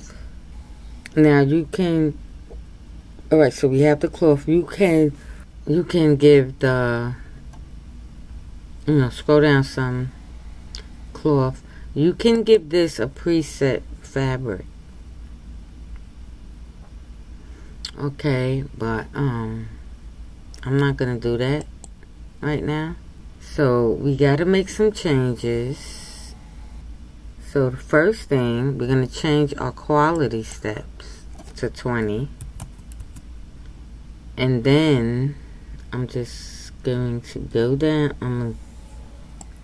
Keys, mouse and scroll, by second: 0.1-39.6 drag.